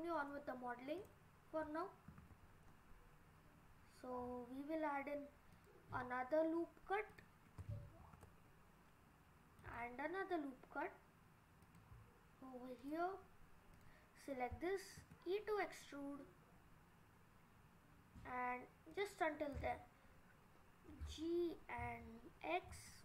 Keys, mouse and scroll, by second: 1.0 click, 2.1 ctrl+r, 8.0 ctrl+r, 12.8 click, 13.7 click, 15.0 e, 19.5 click, 20.9 g.